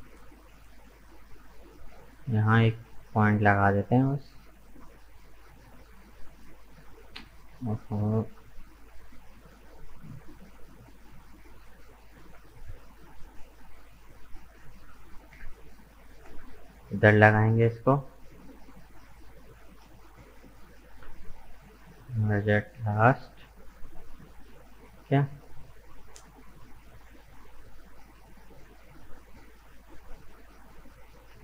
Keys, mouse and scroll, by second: 0.0-2.8 middle drag, 2.8 k, 7.7-8.1 scroll up 4, 8.1-12.2 middle drag, 12.2 k, 17.2-19.1 drag, 19.1 right click, 20.4 shift+right click, 21.8 m, 23.9-24.5 scroll down 3, 24.5-26.8 middle drag, 26.8 Tab, 26.9 right click, 27.3-29.8 middle drag, 29.8 right click, 30.1 Tab, 30.6-31.4 middle drag.